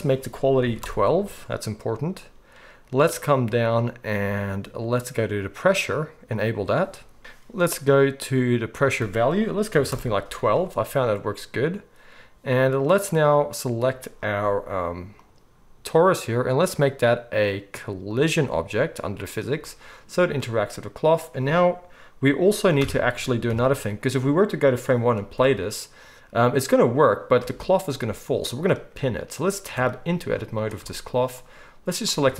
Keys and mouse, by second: 5.7-8.7 middle drag, 8.7-15.2 drag, 15.2-18.1 middle drag, 18.1-28.3 drag, 22.8 shift+Left, 23.4 KP_1, 25.3 space, 27.4 space, 28.3-31.4 middle drag, 29.6 Tab, 30.2 z, 31.4-32.3 drag.